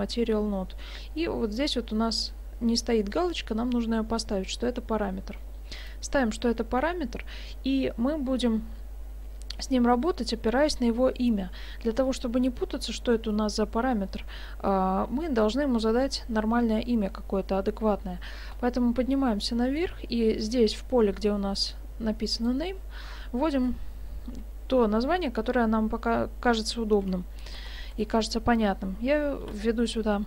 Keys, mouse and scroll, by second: 5.8 click, 10.6-11.7 scroll up 1, 11.7-12.4 scroll down 1, 18.5-21.8 scroll up 1, 22.4 click.